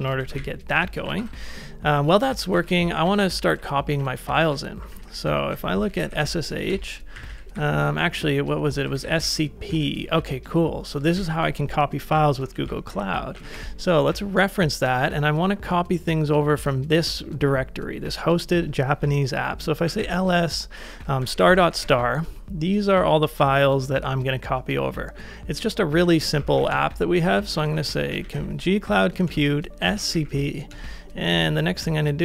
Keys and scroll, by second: 0.4 ctrl+a, 1.0 ctrl+a, 1.2 shift+', 2.5-6.7 typing, 8.6-9.7 typing, 11.1 ctrl+a, 11.1 ctrl+j, 12.6-14.0 typing, 19.6-21.9 typing, 25.8-30.7 typing.